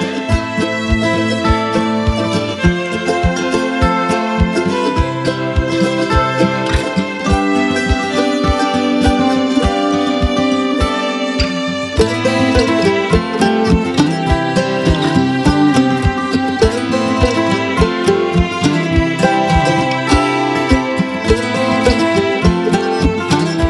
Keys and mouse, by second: 9.6 click, 11.0 alt+BackSpace, 12.2 ctrl+z, 13.9 right click, 14.7 click, 15.6 Return, 16.3 alt+BackSpace, 17.4 ctrl+z, 20.5 space, 21.1 click, 21.2 space, 21.4 click, 21.6-22.0 space, 22.5 click, 22.6-23.2 space, 23.2 right click.